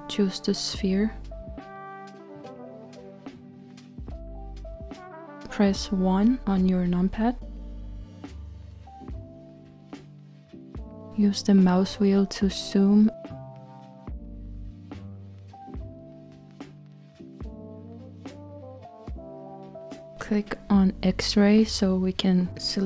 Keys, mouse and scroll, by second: 6.9 KP_1, 11.8-13.2 scroll up 3, 13.2-14.5 scroll up 1, 14.5-17.4 scroll up 1, 17.4 scroll up 1, 18.0-21.0 scroll up 1, 21.0-22.8 drag.